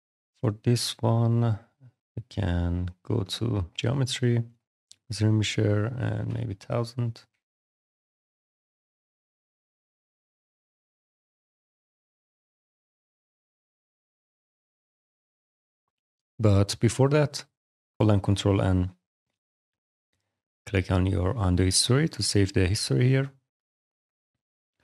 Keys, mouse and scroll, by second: 0.8 click, 4.4 click, 5.8 click, 6.0 1, 6.3 click, 6.8 click, 7.4 alt+click, 13.7 shift+f, 14.1 click, 16.7 ctrl+click.